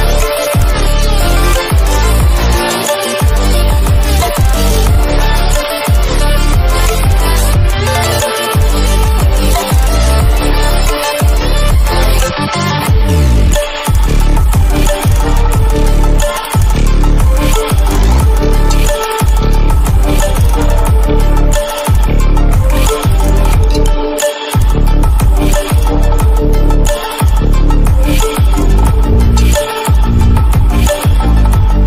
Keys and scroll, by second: 5.9 ctrl+=, 13.1 ctrl+=, 13.9 ctrl+-, 14.5 ctrl+0, 16.4 ctrl+=, 18.5 ctrl+-, 20.8 e, 22.0 ctrl+j.